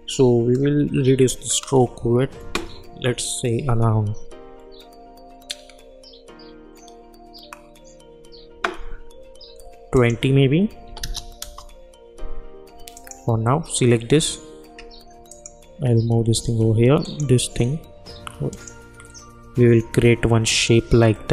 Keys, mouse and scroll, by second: 11.4 Return, 12.9 click, 15.3 shift+click, 17.0 shift+click.